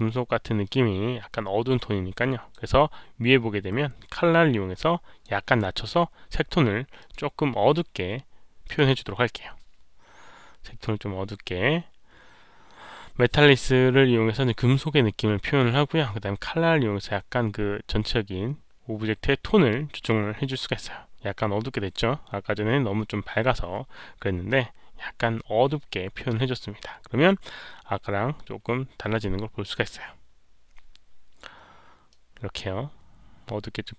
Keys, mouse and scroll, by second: 0.5 click, 4.7 click, 6.9 click, 8.6 click, 32.0-33.8 drag.